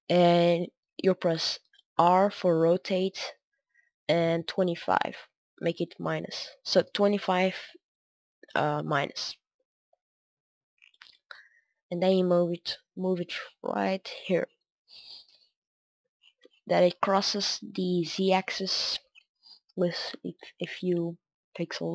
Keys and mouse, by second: 1.8 r, 8.6-11.0 drag, 11.3-21.9 middle drag.